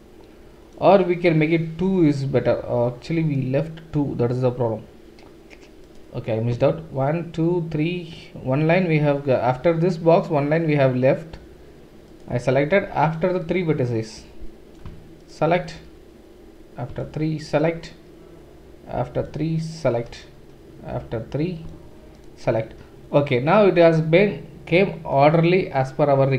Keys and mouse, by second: 5.8 click, 12.1 shift+click, 12.9-21.2 right drag, 17.4 shift+click, 17.4 shift+middle click, 19.7 shift+click, 19.7 shift+middle click, 22.1 shift+click.